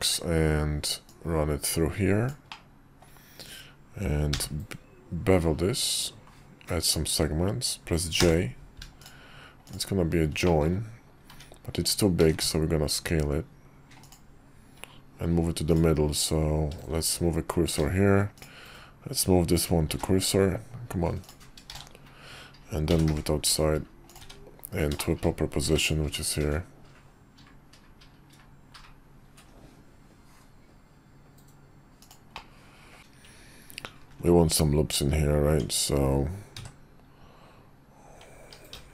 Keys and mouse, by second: 0.1 click, 1.1-2.5 middle drag, 2.5-9.2 drag, 10.4 middle drag, 11.3 `, 12.2 s, 17.0 shift+s, 19.8 shift+s, 21.8 shift+s, 22.9 g, 24.2 `, 24.9 shift+middle click, 25.6 g, 32.3 middle click, 33.0 shift+g, 34.0 ctrl+r, 35.5 Tab, 36.6 2, 38.7 ctrl+r.